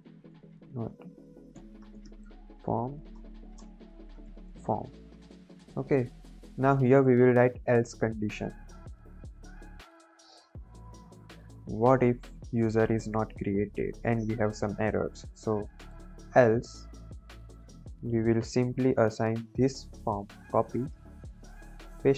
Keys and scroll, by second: 0.2-4.9 typing, 2.7 Right, 5.0 Right, 5.2 Up, 5.4 Up, 5.7 Down, 11.0 BackSpace, 15.5-16.9 typing, 17.1 Return, 20.5 ctrl+c, 21.8 ctrl+v.